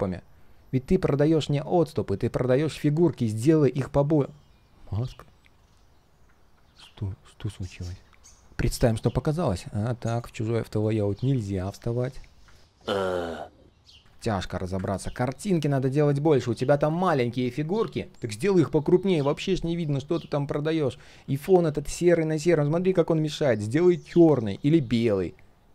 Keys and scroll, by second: 6.9 ctrl+z.